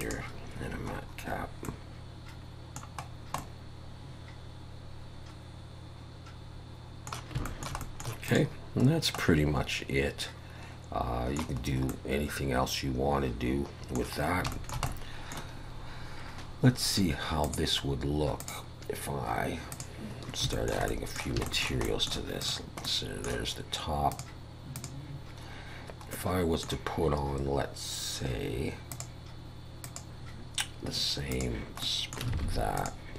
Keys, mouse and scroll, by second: 1.0 scroll up 2, 1.6 middle click, 3.1 scroll down 2, 3.4 middle click, 7.4 shift+middle click, 8.3 click, 8.9-9.2 scroll down 2, 9.2 middle click, 11.6-11.9 scroll up 3, 11.9 middle click, 14.2 scroll down 1, 14.5 shift+middle click, 14.9 middle click, 17.4 click, 19.8 click, 20.2 scroll up 2, 20.5 shift+middle click, 20.9 middle click, 21.5 shift+middle click, 21.9 middle click, 22.4 click, 22.9 middle click, 24.1 click, 24.8 click, 26.1 middle click, 28.9 click, 29.8 click, 31.8 middle click, 32.4 alt+a, 32.8 click.